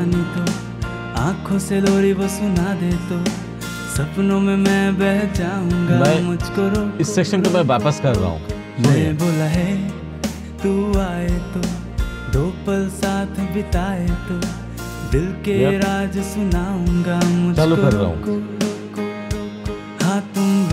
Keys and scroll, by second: 17.6-20.5 typing.